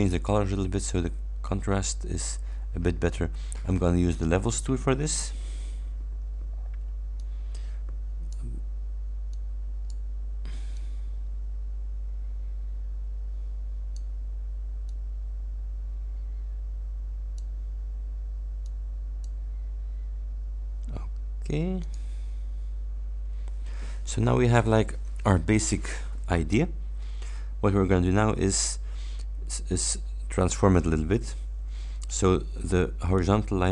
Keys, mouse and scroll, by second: 0.0 click, 4.2 click, 7.2-8.6 drag, 9.4-10.2 drag, 10.8-14.2 drag, 14.9 click, 18.7-19.5 drag, 21.8 click.